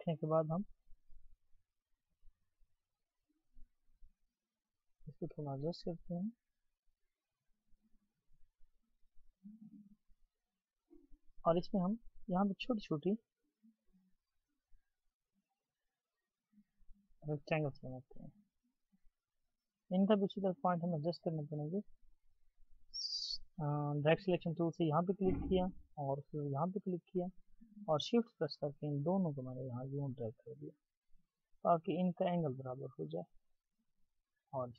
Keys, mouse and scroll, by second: 2.2 ctrl+Down, 4.0-7.6 alt+scroll up 1, 11.0-11.5 scroll, 26.4 shift+click.